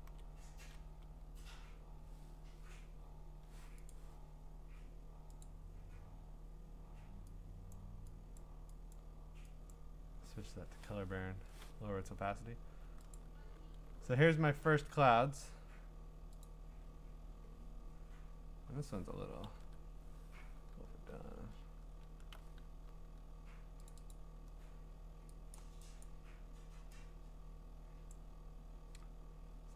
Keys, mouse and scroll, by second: 0.6 Up, 3.9 Up, 3.9-5.4 drag, 7.7 click, 8.4 click, 8.9 click, 9.7 click, 10.6 Return, 13.1 click, 14.4 scroll, 14.4 middle click, 14.5 middle click, 14.5 middle click, 16.4 click, 18.9 click, 19.4 ctrl+i, 21.4-22.1 scroll, 23.9 click, 24.1 click, 25.5 click, 26.0 click, 28.1 click.